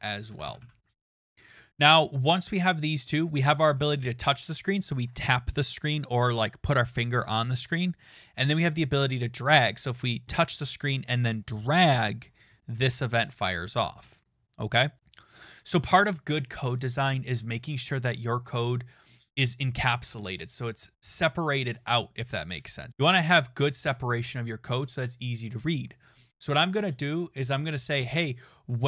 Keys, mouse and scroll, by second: 0.0-1.4 typing, 3.5-4.2 typing, 26.7 click.